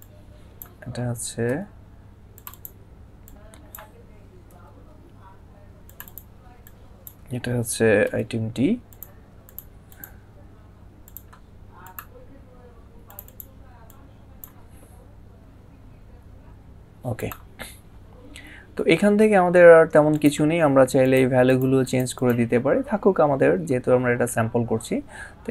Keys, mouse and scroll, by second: 2.8 click, 5.7 click, 16.0 c, 19.9 click.